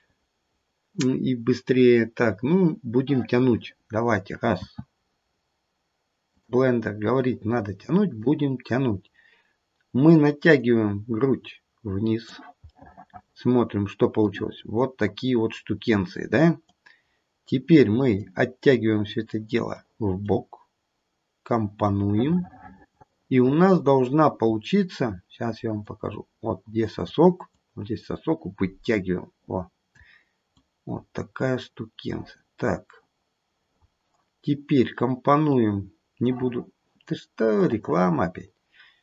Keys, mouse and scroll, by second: 4.7 f, 8.2 click, 12.7 middle click, 14.5-15.4 scroll up 2, 15.4 scroll down 1, 15.7-16.4 scroll down 1, 16.7 click, 18.8 click, 20.2 click, 22.1 middle click, 22.3 middle click, 22.7 middle click, 22.8 middle click, 23.2 middle click, 24.4-25.9 scroll up 1, 25.9 click, 25.9 scroll up 1, 27.5 click, 30.5 click, 33.7-34.2 scroll up 1, 34.2-35.5 scroll down 1, 35.5 click.